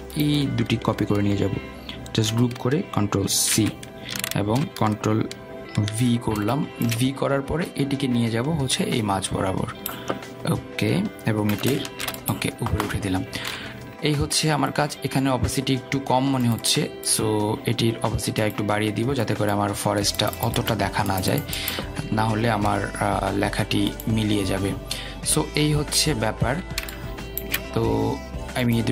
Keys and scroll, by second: 3.4 ctrl+g, 4.7 ctrl+c, 7.1 ctrl+v, 14.6 ctrl+shift+].